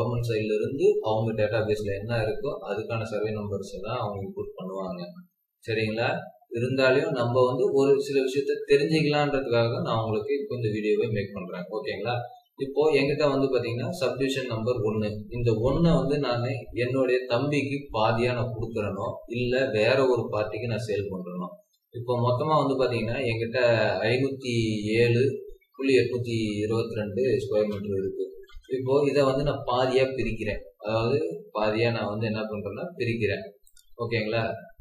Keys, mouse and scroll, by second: 13.7-15.2 scroll up 1, 22.2-22.8 scroll down 1, 22.8 scroll up 1, 27.2-28.5 typing.